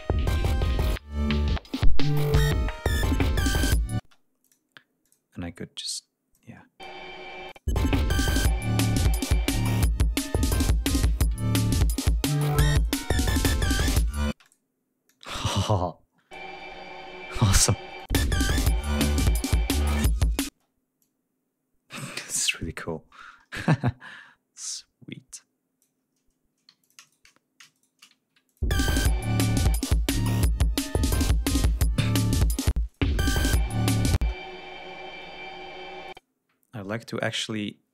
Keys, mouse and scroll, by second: 1.7 ctrl+scroll down 2, 1.9 ctrl+scroll up 2, 4.1 space, 4.5 click, 5.1 click, 5.8 click, 6.4 click, 7.5 click, 7.8 space, 10.7 ctrl+scroll down 2, 12.9 click, 13.5 click, 14.4 space, 14.5 click, 15.2-16.6 drag, 16.9 ctrl+scroll up 2, 18.1 click, 18.2 space, 19.1 ctrl+scroll down 2, 19.4 ctrl+scroll up 2, 20.6 space, 21.1-22.3 drag, 24.7-26.1 drag, 26.8 g, 26.9 shift+click, 27.1 shift+right click, 27.8 shift+right click, 28.6 ctrl+click, 28.7 ctrl+space, 29.1 ctrl+scroll down 2, 30.6 ctrl+scroll up 2, 32.8 space, 33.0 click, 34.3 space, 36.1 ctrl+click, 37.0 d, 37.5-37.9 scroll up 2.